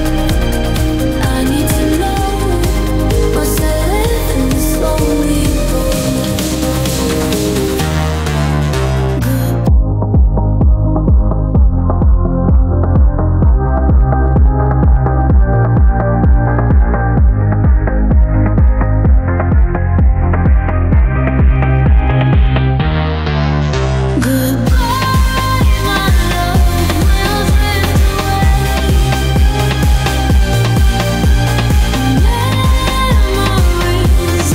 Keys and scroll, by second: 1.4 ctrl+z, 3.5 Delete, 11.2 Delete, 13.4 space, 18.3 ctrl+z, 19.4 ctrl+z, 20.3 space, 23.9 ctrl+z, 28.3 ctrl+z, 33.0 ctrl+z.